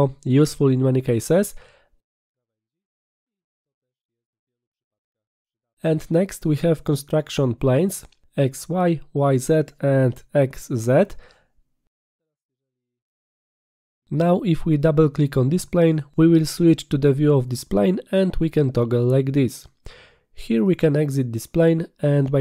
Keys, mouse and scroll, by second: 3.3 click, 11.7 right click, 13.1 click, 14.6 click, 14.7 click, 18.4 click, 20.5 click, 20.6 click, 22.2 click.